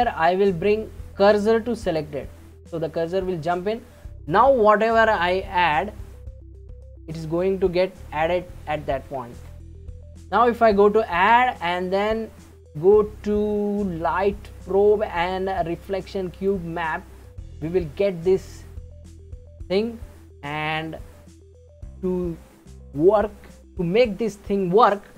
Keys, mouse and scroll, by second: 5.2-8.2 drag, 9.3 ctrl+z, 10.5-13.6 drag, 17.3-20.3 middle drag.